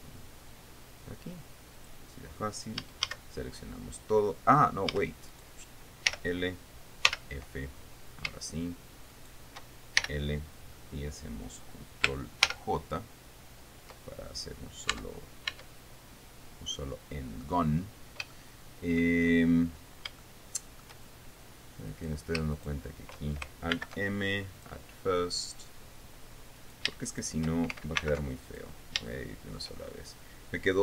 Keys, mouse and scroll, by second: 2.3 click, 3.4 a, 5.4 a, 5.8 right click, 6.6 l, 7.6 f, 9.7 shift+right click, 10.6 shift+l, 13.0 ctrl+j, 15.5 Tab, 17.3 click, 18.9 shift+click, 20.0-20.6 shift+scroll up 3, 20.8 shift+middle click, 22.4 right click, 23.1 shift+right click, 24.3 alt+m, 25.2 click, 27.2 shift+right click, 27.6 shift+right click, 28.6 alt+m, 29.0 alt+click, 29.6 shift+middle click.